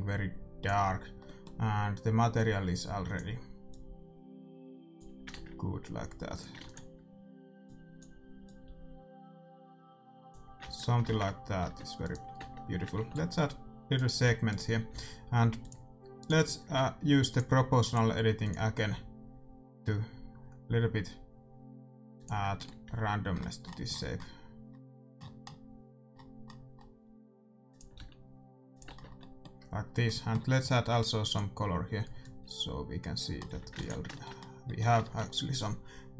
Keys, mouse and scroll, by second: 1.2-5.0 middle drag, 2.3-5.6 drag, 5.4 shift+z, 6.3-10.4 drag, 6.6 ctrl+s, 10.6 ctrl+s, 11.1 middle click, 11.1 shift+z, 11.6 Tab, 12.0-13.9 right drag, 12.3 Tab, 12.9 ctrl+r, 14.2 a, 14.6-17.9 right drag, 14.8 a, 15.7-20.3 drag, 22.5-24.5 middle drag, 22.8 g, 27.9 r, 28.8 Tab, 28.9 middle click, 31.2-33.0 drag, 33.5 a, 33.7 ctrl+s.